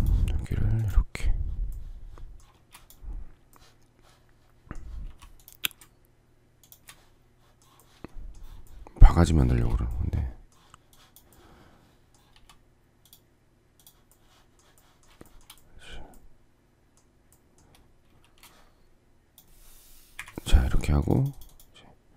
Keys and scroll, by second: 2.4 space, 4.9 m, 9.4 space, 12.2 s, 18.0 space, 20.0 Delete.